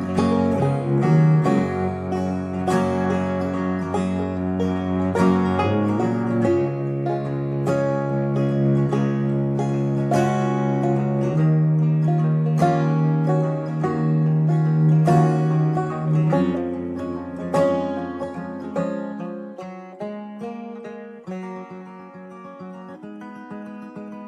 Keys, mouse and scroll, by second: 14.6 middle click.